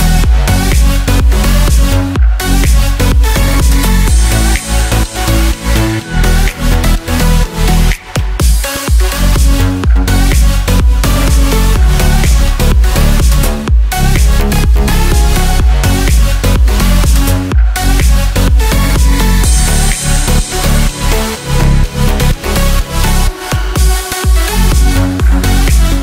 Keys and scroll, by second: 6.0 ctrl+z, 14.4 ctrl+t, 19.1 ctrl+t.